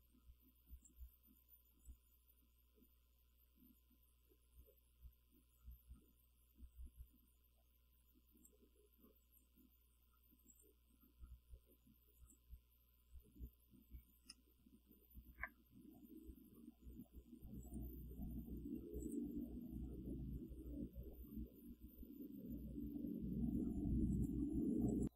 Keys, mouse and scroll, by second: 1.9-8.7 drag, 9.3 click, 10.6 click, 12.2 click, 13.8 scroll up 2, 14.1 ctrl+scroll down 2, 14.2 ctrl+scroll up 2, 14.3 ctrl+scroll down 2, 14.4-15.6 ctrl+drag, 17.7 click, 19.1 click, 24.2 click, 25.0 click.